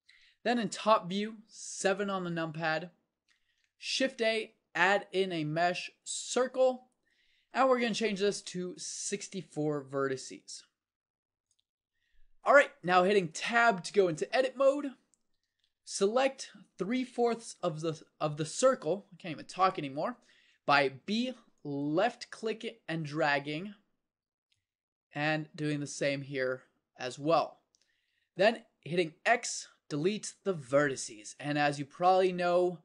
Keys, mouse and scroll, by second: 1.8 KP_7, 3.9 shift+a, 13.1 middle click, 13.7 Tab, 15.5 a, 21.0 b, 24.2 b, 27.4-30.8 drag, 29.2 x.